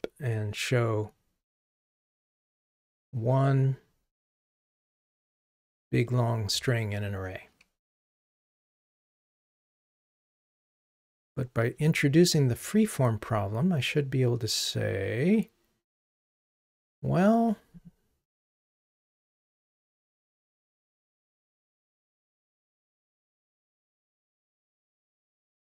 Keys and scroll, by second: 11.7 super+/, 23.0 ctrl+r.